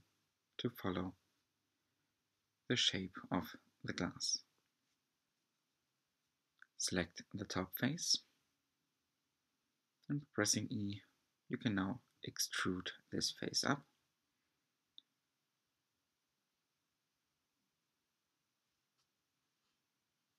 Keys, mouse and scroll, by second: 0.6-1.3 scroll down 5, 0.8 middle click, 1.4 3, 1.4 click, 2.3 click, 2.7 scroll up 1, 2.8 shift+middle click, 3.4 e, 4.9 alt+z, 5.3 s, 11.2 e, 14.3 scroll down 2, 14.6 shift+middle click, 15.3 e, 17.6 shift+middle click, 18.3 e.